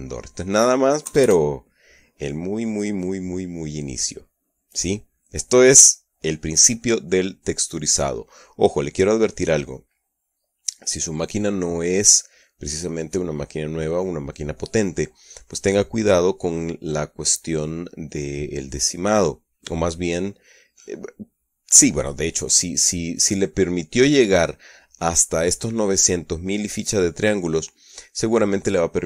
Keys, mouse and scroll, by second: 0.4-1.4 shift+middle drag, 1.9 KP_Add, 1.9-2.7 scroll up 1, 2.7-5.5 scroll up 1.